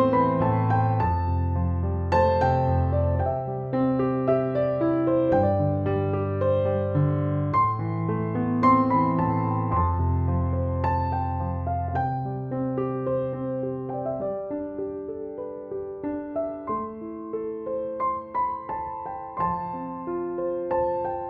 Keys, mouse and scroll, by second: 0.0-7.2 typing, 0.3 click, 1.9 click, 2.6 click, 3.7 ctrl+=, 7.2-8.1 click, 8.3 ctrl+z, 9.3 ctrl+-, 10.9 ctrl+=, 13.0 click, 13.7 ctrl+j, 14.7 ctrl+], 15.6 click, 19.2 space, 19.4 click, 19.7-20.0 space, 20.4 ctrl+l.